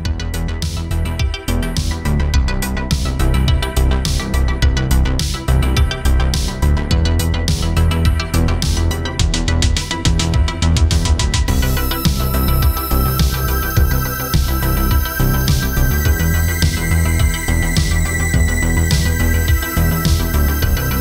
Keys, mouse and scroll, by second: 0.3 click, 3.3 shift+d, 4.3 click, 6.3 shift+d, 6.9-8.5 scroll down 4, 7.4 click, 9.3 click, 9.5-10.3 scroll down 4, 10.0 shift+click, 11.5 shift+d, 12.4 click, 13.3-13.7 scroll up 8, 13.7 middle click, 14.4 shift+middle click, 16.1-16.5 scroll up 4, 16.5-17.4 scroll down 3, 16.7 middle click, 18.0 shift+middle click, 18.3 scroll up 3, 19.1 scroll up 2, 19.3 shift+middle click, 19.9 scroll down 1, 20.0 middle click, 20.5 shift+middle click, 20.9 middle click.